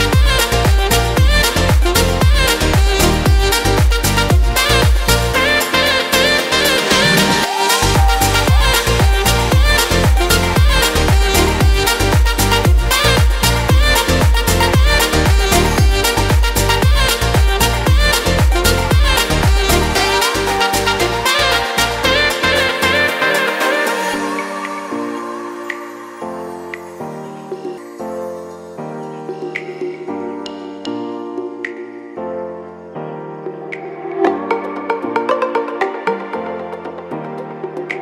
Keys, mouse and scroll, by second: 1.5 click, 7.8 Delete, 19.3 F4.